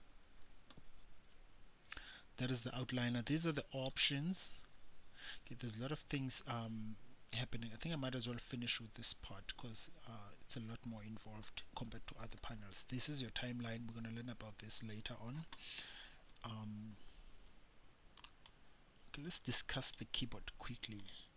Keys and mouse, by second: 3.5-5.3 drag, 18.7-20.5 drag.